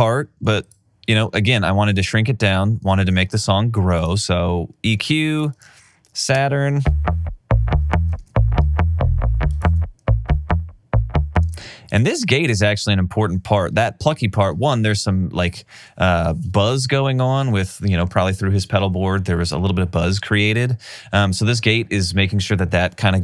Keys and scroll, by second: 2.4 alt+super+w, 6.3 super+space, 8.2 alt+super+w, 11.4 space.